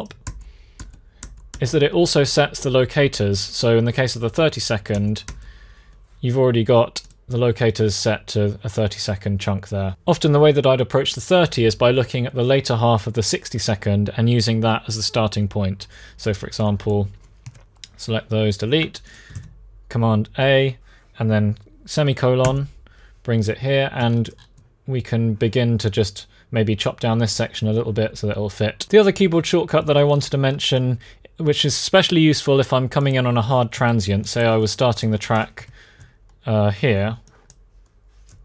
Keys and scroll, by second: 0.0 alt+., 0.5 alt+., 1.0 alt+,, 4.7 alt+., 5.0 alt+,, 17.2 BackSpace, 19.1 super+a, 22.2 i, 33.5 BackSpace, 35.3 BackSpace, 38.3 super+a.